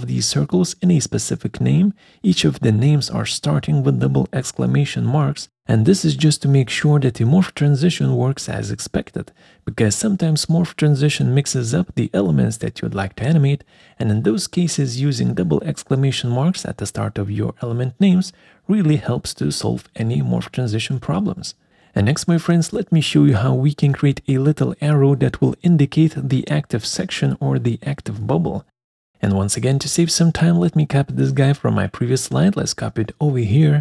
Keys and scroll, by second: 30.3 ctrl+c.